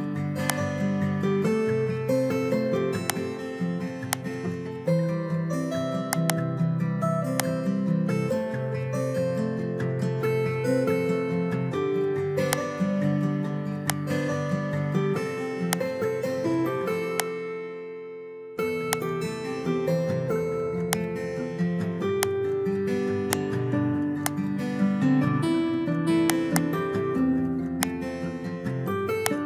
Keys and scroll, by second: 1.8 ctrl+v, 9.9 ctrl+v.